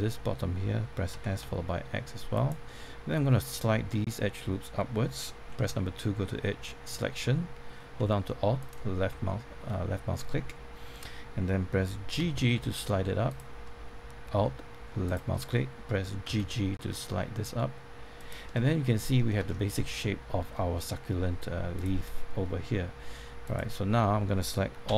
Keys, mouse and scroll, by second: 0.0 middle click, 1.1-1.4 typing, 2.3 click, 2.6 middle click, 5.5 2, 9.2-10.4 middle drag, 12.2 typing, 13.2 click, 16.2 alt+g, 16.4 alt+g, 18.1 click, 18.4 middle click, 19.4 shift+middle click, 21.7-24.4 drag, 24.8 a.